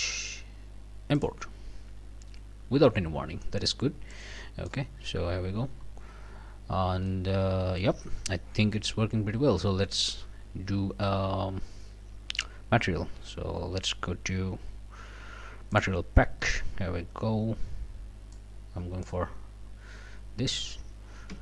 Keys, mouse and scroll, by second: 1.2 click, 2.7 scroll down 2, 3.1-3.4 scroll up 1, 4.1 click, 5.4 scroll down 1, 5.7-6.4 scroll up 2, 6.5 scroll down 1, 7.1 click, 8.8 f, 15.7 click, 18.6 click, 19.8-20.2 scroll down 2, 20.2 scroll up 2, 21.3 f.